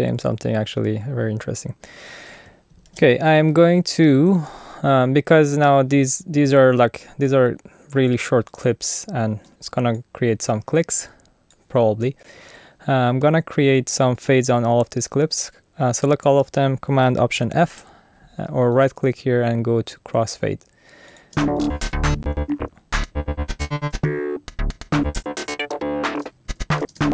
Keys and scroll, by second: 2.8 alt+super+u, 17.6 alt+super+f, 21.3 space, 26.4 super+z, 26.8 super+space.